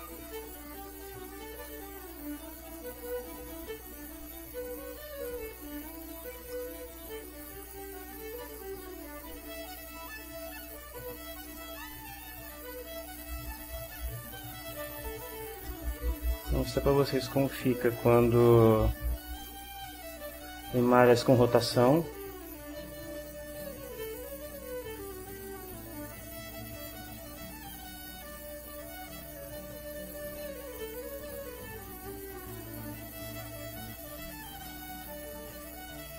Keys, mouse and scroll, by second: 0.3 click, 1.9 click, 2.6 click, 6.5-7.9 middle drag, 7.9-9.2 drag, 9.7-10.9 ctrl+drag, 11.4-13.5 drag, 15.6 click, 16.5-17.5 shift+drag, 19.2 click, 20.4-22.1 drag, 23.2 click, 26.4-27.5 drag, 27.8-30.2 right drag, 31.0 click, 31.7-36.1 right drag.